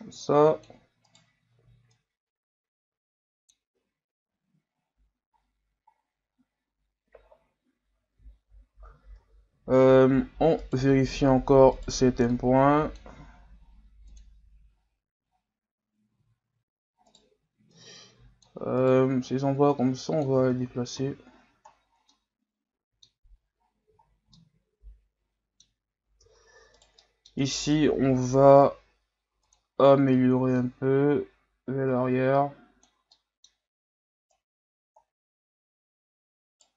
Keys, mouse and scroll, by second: 1.1 right click, 2.0-3.7 drag, 3.7 Tab, 4.3 a, 4.7-5.4 scroll down 3, 5.4-7.2 scroll down 5, 7.2-7.8 scroll up 6, 7.8 scroll down 6, 8.3-8.8 scroll up 6, 9.9 scroll up 2, 10.6 right click, 10.9 Tab, 11.7 right click, 12.3-14.2 drag, 16.2 scroll up 2, 17.2 right click, 17.7-18.8 drag, 18.8 right click, 19.3-20.4 drag, 20.4 Tab, 21.0 a, 21.3-22.1 scroll down 9, 22.1-23.3 middle drag, 23.3-24.0 scroll up 2, 24.0-24.3 scroll down 3, 24.3-25.8 middle drag, 25.8-26.2 scroll up 3, 26.2 Tab, 26.7 right click, 27.0-28.0 middle drag, 28.0 o, 29.5 click, 30.6-33.1 drag, 33.1-34.3 middle drag, 34.3 right click.